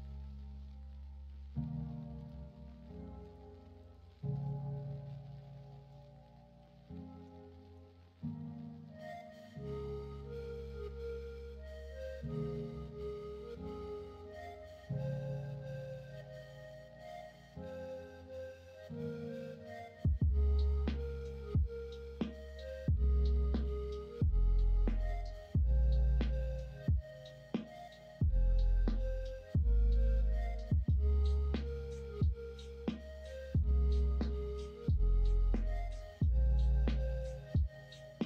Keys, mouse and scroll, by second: 6.6-7.7 middle drag, 8.2-8.8 middle drag, 10.3-11.0 middle drag, 11.5-11.9 middle drag, 12.8 Tab, 13.5 middle click, 13.8 Tab, 14.4-15.1 middle drag, 15.5-16.0 middle drag, 16.5-17.9 middle drag, 19.3-20.7 middle drag, 20.9 shift+middle drag, 21.7 middle click, 22.1 middle click, 22.8-23.4 middle drag, 24.6-25.3 middle drag, 25.9 middle click, 26.7 middle click, 28.2-30.2 middle drag, 31.3-31.9 middle drag.